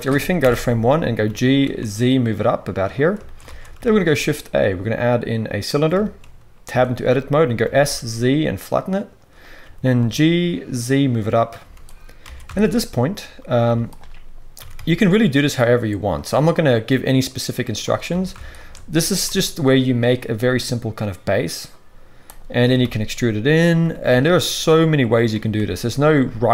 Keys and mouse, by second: 0.4 shift+Left, 1.2 g, 3.4 alt+a, 6.6 Tab, 7.6 s, 9.4-14.5 middle drag, 9.6 g, 11.6 z, 12.2 alt+a, 13.6 z, 14.5 e, 18.1 alt+a, 18.5 alt+shift+click, 18.9 g, 20.3-26.5 middle drag, 20.3 s, 22.6 e, 23.8 g, 25.3 e.